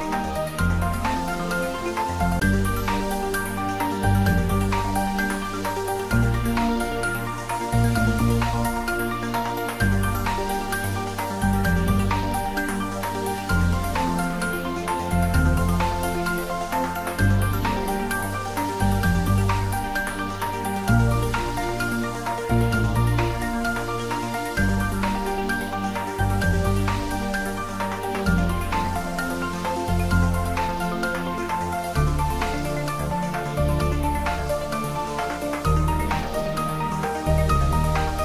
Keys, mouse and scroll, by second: 2.3-2.9 typing, 5.3 scroll up 1, 7.9-11.2 drag, 11.2-12.4 scroll up 1, 13.5-14.9 drag, 14.9-16.2 scroll up 1, 17.4 alt+shift+click, 20.6-21.5 scroll down 1, 23.2 alt+shift+click, 23.9-25.7 alt+shift+scroll down 1, 25.7-26.8 shift+scroll down 2, 26.9-30.0 scroll up 1, 32.5-33.1 scroll down 1, 34.0 ctrl+z, 36.2-36.7 scroll up 1, 36.7-38.2 middle drag.